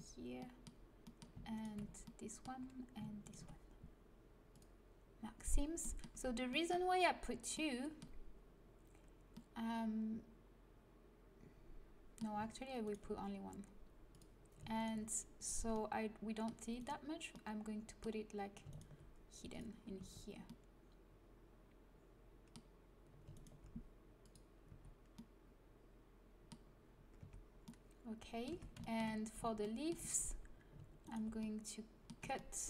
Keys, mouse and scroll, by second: 4.4-7.3 drag, 4.4 right click, 6.3 a, 7.3-11.3 middle drag, 12.7-14.1 right drag, 14.0 click, 14.6 click, 15.7 middle click, 16.5 click, 17.2 right click, 17.5-19.4 drag, 19.9 a, 20.4 click, 23.2-25.0 right drag, 24.1-26.0 drag, 24.6 a, 26.4 middle click, 27.1 Tab, 27.4 middle click, 28.4 Tab, 31.0 middle click.